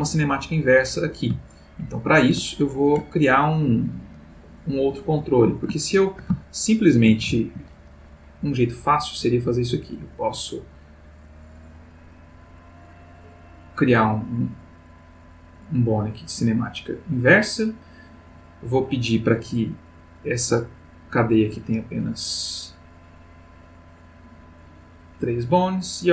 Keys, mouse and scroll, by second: 1.4-2.3 shift+middle drag, 2.6-3.1 ctrl+middle drag, 5.0 click, 5.8-7.3 ctrl+middle drag, 9.1 click, 13.1 click, 16.3 click, 22.8 click, 23.5 click, 24.3 click.